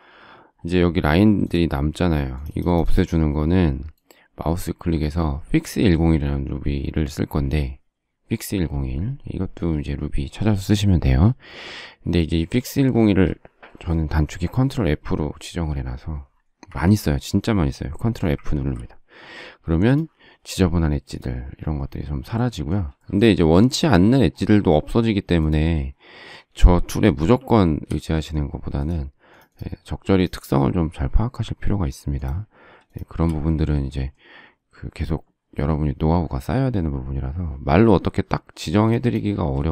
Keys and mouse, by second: 16.7 Escape, 18.5 ctrl+f, 27.2 shift+c, 29.3 click, 38.8 click.